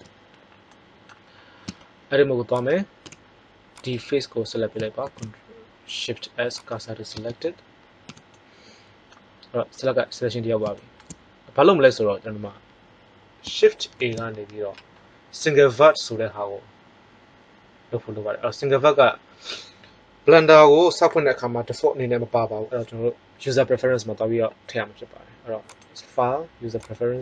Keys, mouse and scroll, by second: 0.6-1.6 middle drag, 1.6 Tab, 2.5 right click, 2.9 z, 5.0 shift+s, 7.1 Tab, 8.0 z, 13.9 shift+a, 25.6-27.0 drag.